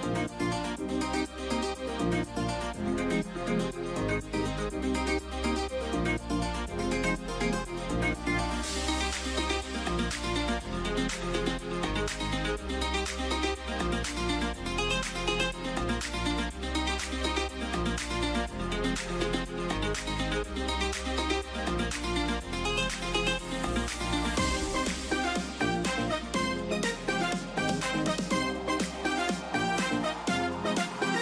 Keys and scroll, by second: 13.4 ].